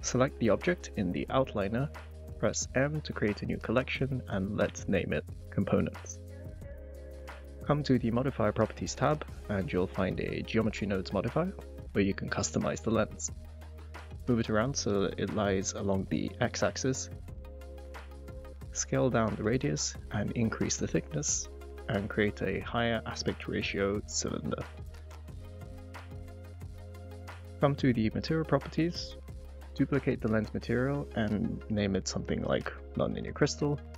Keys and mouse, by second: 1.8 m, 18.2 click, 20.3 click, 21.7-24.3 drag, 24.8 ctrl+z, 25.2 g, 25.3 x, 27.5 click, 30.0 click, 30.4 click, 30.5-32.5 drag.